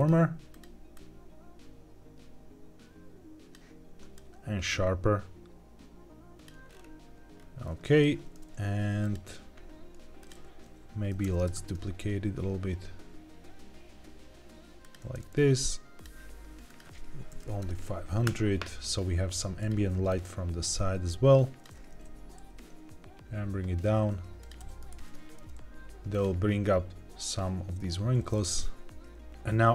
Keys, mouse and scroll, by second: 0.4 click, 4.1-6.6 drag, 6.6-7.1 scroll up 3, 7.3-7.7 scroll down 2, 7.7 shift+middle click, 8.9 click, 10.1 click, 11.1 shift+d, 11.5 shift+z, 14.7 click, 16.6-18.2 drag, 17.5 KP_0, 19.5 click, 21.8 g, 21.9 z, 24.3 click, 24.5 g, 24.8 shift+z, 26.0-27.9 drag, 29.3 click.